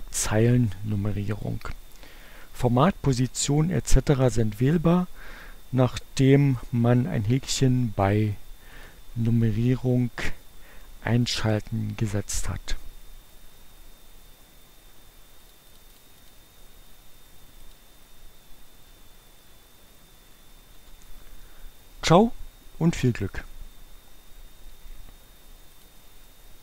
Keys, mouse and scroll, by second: 1.5 click, 8.9 click, 15.4 click, 17.7 click, 19.0 Return, 20.0 Return, 25.4 click.